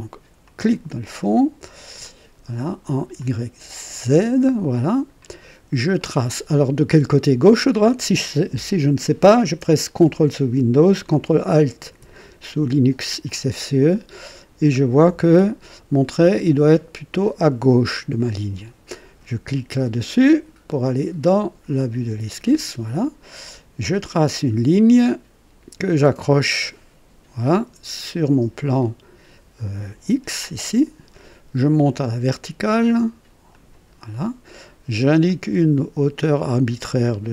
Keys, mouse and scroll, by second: 0.4 click, 2.0 click, 3.2 click, 3.9 click, 4.7 right click, 5.4 scroll up 2, 6.0 right click, 13.2-15.1 ctrl+alt+drag, 21.7 click, 24.1 click, 30.6 click, 33.5 click, 34.1 right click, 35.3 click, 36.3 click.